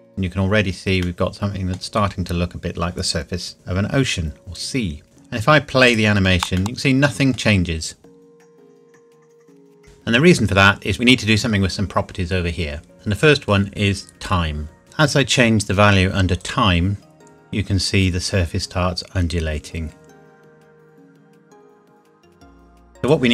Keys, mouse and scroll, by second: 1.0 middle click, 2.5 scroll up 1, 4.9 click, 6.8 middle click, 9.6 click, 14.8 KP_Enter, 16.4 click.